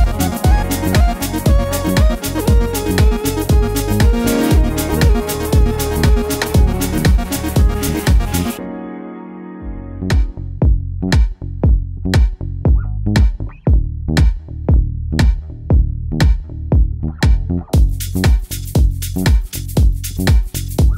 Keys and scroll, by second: 8.4 super+c, 9.6 super+v, 12.1 Right, 12.2 Right.